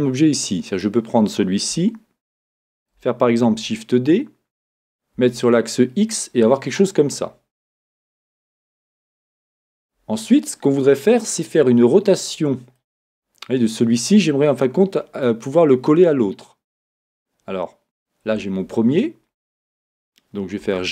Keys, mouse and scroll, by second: 0.7 click, 1.7 shift+middle click, 6.0 shift+d, 6.8 click, 12.3-12.8 scroll, 12.8-20.6 middle drag, 20.6 g.